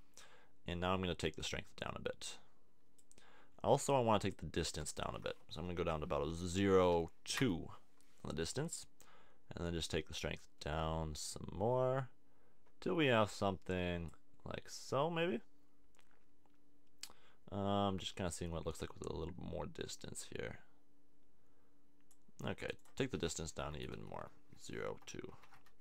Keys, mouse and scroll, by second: 1.5 click, 3.6 click, 9.7-11.5 drag, 14.7-16.3 drag, 23.6 BackSpace.